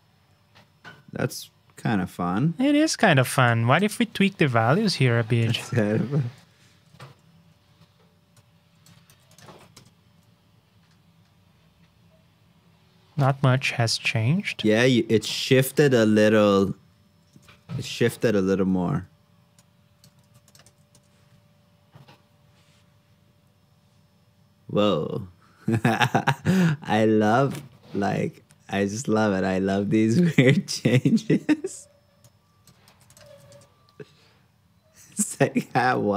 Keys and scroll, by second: 9.0 super+c, 9.5 super+v, 20.2 super+c, 20.6 super+v, 32.8 super+c, 33.2 super+v.